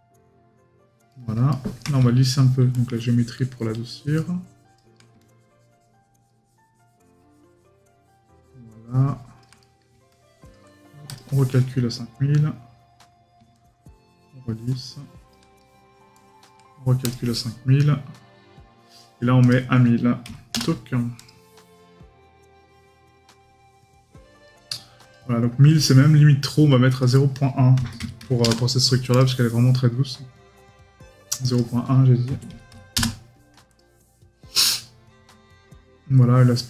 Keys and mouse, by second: 1.1 right click, 9.6 right click, 15.6 right click.